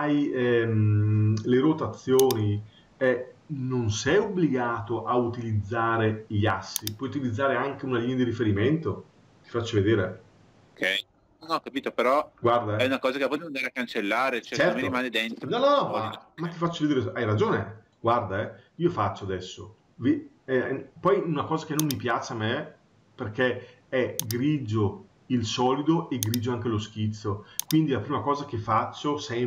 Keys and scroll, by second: 3.9 Escape.